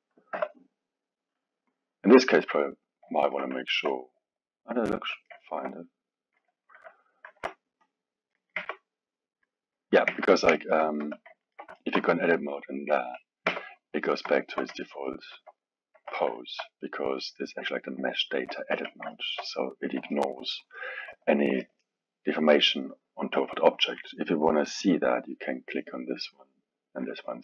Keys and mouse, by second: 0.0 click, 0.2 click, 0.3 r, 3.2-7.3 ctrl+middle drag, 7.3 ctrl+Tab, 7.8-8.3 drag, 8.3 middle click, 8.6 Tab, 9.4 middle click, 10.1 Tab, 10.5-11.0 ctrl+middle drag, 11.0 KP_1, 11.4-13.5 ctrl+middle drag, 13.5 Tab, 14.0-16.0 middle drag, 16.0 KP_1, 16.4-18.7 alt+middle drag, 18.7 KP_1, 19.1-23.8 ctrl+middle drag, 25.6 click, 26.5-27.3 drag, 27.3-27.4 middle drag.